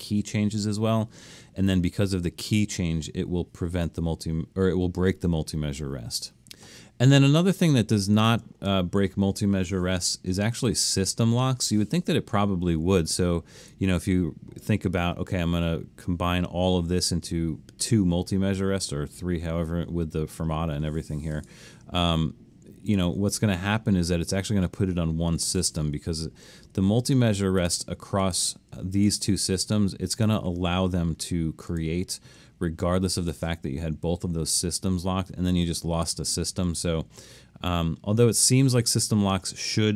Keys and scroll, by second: 10.0 i, 26.9 super+z, 36.7 super+z.